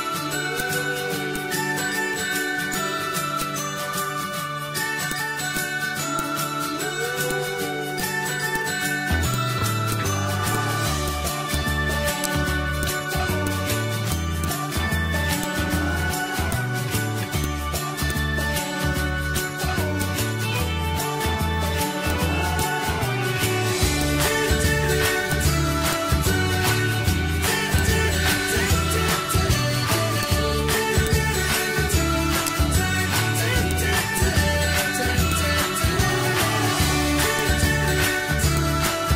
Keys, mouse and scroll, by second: 2.0 ctrl+c, 2.7-5.0 drag, 5.5 shift+click, 6.1 click, 7.3 click, 12.2 shift+right click, 12.8 click, 14.1 shift+click, 16.5-21.5 drag, 21.8 ctrl+q, 22.1-24.0 drag, 24.0-25.3 drag, 25.3-32.5 drag, 32.5 shift+right click, 32.9 ctrl+d, 33.7 click, 34.7 ctrl+c, 35.3-37.4 drag, 38.6 click.